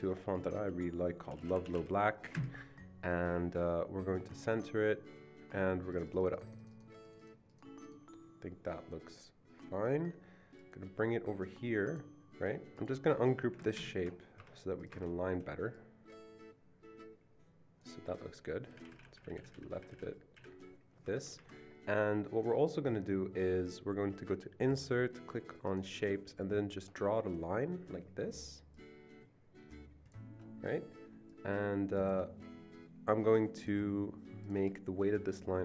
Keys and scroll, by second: 1.0-1.8 typing, 2.3 Return, 13.7 ctrl+shift+g, 14.4 ctrl+shift+g, 14.4 Escape, 14.9 Escape, 18.7 Left, 18.8 Left, 18.9 Left, 19.1 Left, 19.3 Left, 19.4 Left, 19.5 Left, 19.7 Left, 19.9 Left, 20.4 Left, 21.2 Escape.